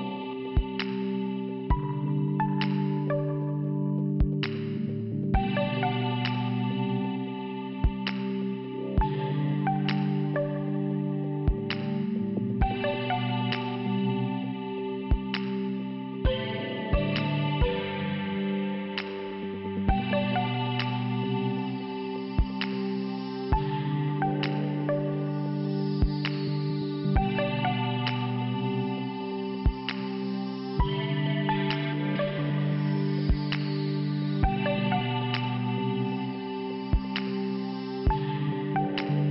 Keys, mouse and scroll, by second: 6.4 click, 6.5 click, 7.3 click, 8.4 scroll down 1, 10.1 5, 11.5 scroll down 1, 11.6 scroll up 2, 11.8 scroll down 1, 13.0 click, 13.0 scroll up 1, 14.0 click, 15.7 middle click, 20.5 click, 21.9 scroll up 2, 23.8 click, 24.8 click, 25.6 click, 27.3 scroll down 1, 28.0 click, 29.8 click, 31.4 click, 31.4 click, 33.6 click, 34.1 scroll down 1, 36.2 click, 37.4 click, 38.1 click, 39.2 click.